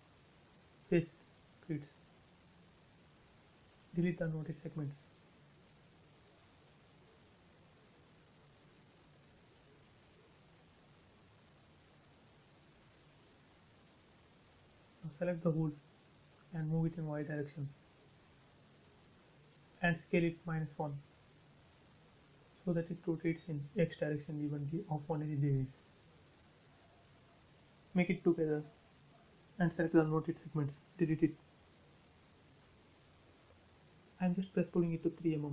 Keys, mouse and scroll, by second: 0.3 click, 0.9 w, 1.3 click, 1.4 click, 3.3 shift+click, 4.3 Delete, 4.6-5.3 scroll down 1, 6.5 shift+middle click, 8.4 click, 9.5 scroll up 1, 9.8 right click, 11.3 click, 12.5-13.1 scroll down 1, 13.5 click, 14.7-15.2 scroll up 1, 15.2-15.6 scroll down 1, 16.7 ctrl+click, 17.8 Left, 18.5 click, 18.7 space, 19.2 s, 20.1 click, 21.3-22.0 typing, 21.8 Return, 23.0-23.8 scroll up 1, 23.8 m, 25.2 click, 26.4 Left, 27.6 click, 27.7 space, 28.1 click, 29.7 Delete, 31.0 p, 31.2 click, 32.9-33.6 typing, 33.5 Return, 34.6 click, 34.9 right click.